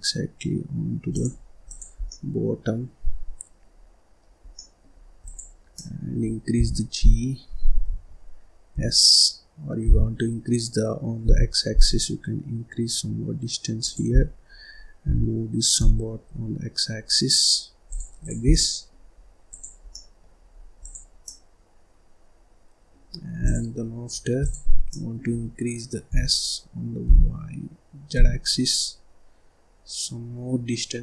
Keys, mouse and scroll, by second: 1.6 click, 1.9 scroll down 2, 2.0-4.3 middle drag, 4.3 scroll down 1, 4.5 middle click, 4.9 scroll up 2, 5.1 click, 5.7 middle click, 6.5 g, 8.6 s, 14.1-14.4 scroll down 1, 14.4-14.9 scroll up 1, 14.9 g, 18.1 click, 18.4 scroll down 1, 18.5 middle click, 19.1-19.4 scroll up 1, 19.4 click, 19.8 middle click, 20.4-20.7 scroll up 1, 20.7 click, 21.1-23.0 middle drag, 23.0-23.3 scroll down 1, 23.3 click, 23.7-24.3 scroll up 4, 24.3 click, 24.8-26.0 middle drag, 26.0 s.